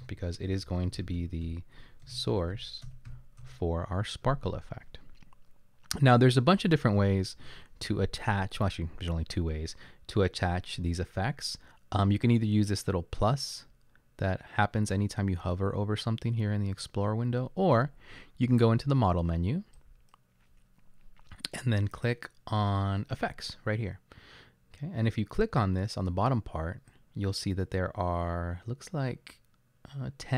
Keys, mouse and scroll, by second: 0.0-3.9 typing, 7.6 typing.